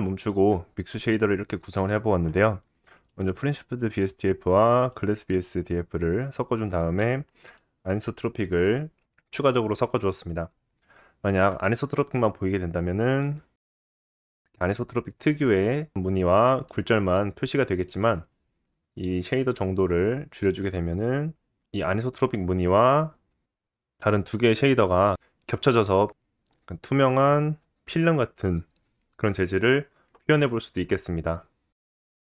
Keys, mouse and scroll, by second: 1.2 middle click, 3.1-4.8 middle drag, 4.8 click, 4.9-6.1 middle drag, 6.1-7.6 drag, 7.6-12.2 middle drag, 12.2-17.0 drag, 13.6 middle click, 14.2 scroll up 1, 16.7 middle click, 17.0 right click, 17.4-23.2 drag, 22.6 shift+middle click, 27.5 click, 28.5-31.5 drag.